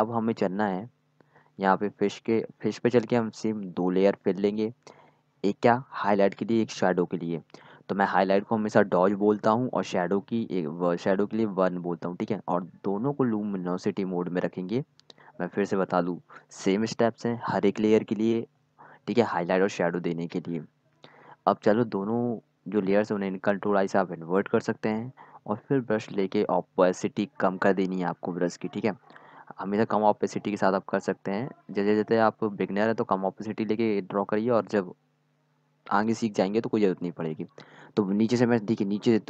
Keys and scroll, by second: 8.9-10.1 typing, 18.4-19.5 typing, 24.4 ctrl+i, 26.1 ctrl+i, 31.8 ctrl+z.